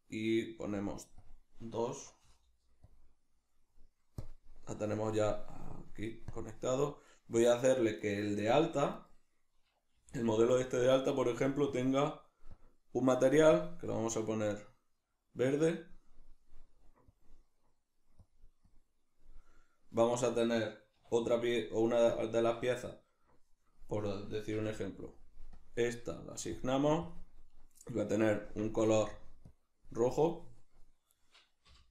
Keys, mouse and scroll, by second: 4.8-5.8 drag, 6.3 drag, 8.0 right click, 8.4 Tab, 9.0 right click, 10.0 g, 10.6 right click, 11.7 click, 12.5 drag, 17.1 click, 21.0 \, 21.5-24.0 middle drag, 22.4 Tab, 24.0 right click, 24.6 l, 25.6-26.7 drag, 27.1 click, 28.8 click, 31.2 right click, 31.8 l.